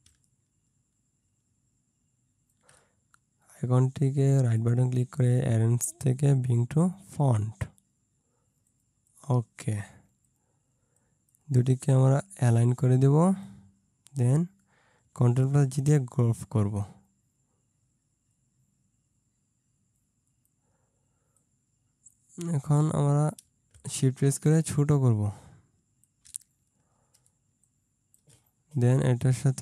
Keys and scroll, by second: 15.7 ctrl+g, 27.4 ctrl+space.